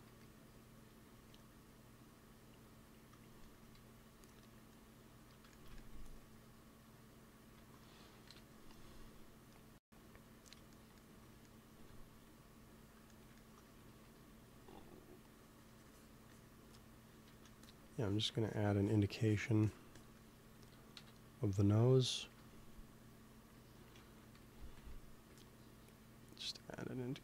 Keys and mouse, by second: 0.2 click, 1.0 f, 4.2-5.7 drag, 5.9 f, 6.5-9.8 drag, 7.4 ctrl+s, 8.2 KP_1, 8.3-9.8 middle drag, 8.3-9.8 right drag, 13.5 x, 13.8 f, 14.5 f, 15.3-21.7 drag, 17.2 ctrl+z, 20.8 KP_2, 22.2 KP_3, 24.3 g, 24.5 f, 25.0 f, 25.6-27.2 drag.